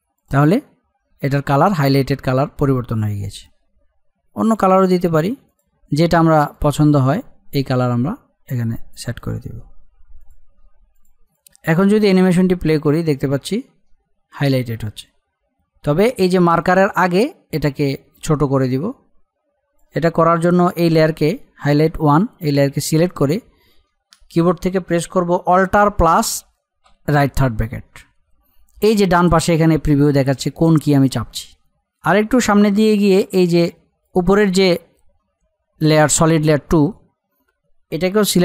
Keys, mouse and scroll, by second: 4.4 click, 9.2-20.6 drag, 26.1 click, 26.8 alt+], 32.1-34.0 drag.